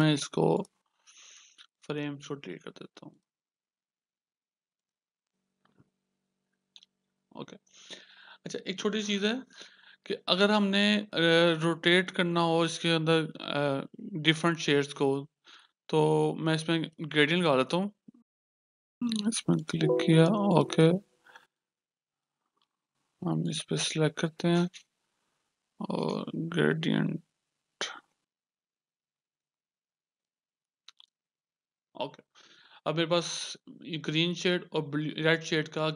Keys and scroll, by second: 18.3 g, 28.8 g.